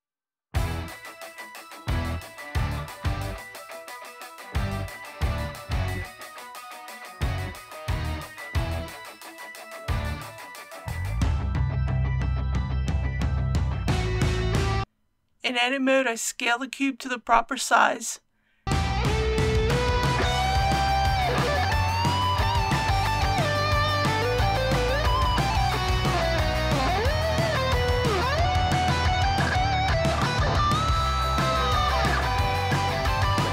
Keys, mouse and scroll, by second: 2.2 click, 4.1-4.6 typing, 4.8 Return, 7.1 KP_1, 15.3 Tab, 17.2 middle click, 18.3 click, 19.4-20.7 typing, 23.8 click, 26.3 ctrl+r, 26.9 click, 29.7 alt+a, 30.6 typing, 31.3-32.4 middle drag, 32.8 click.